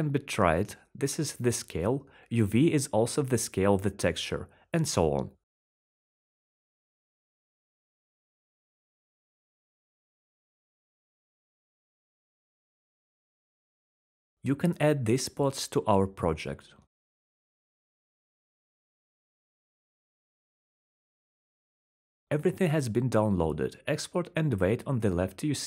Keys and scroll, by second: 9.3-11.9 typing.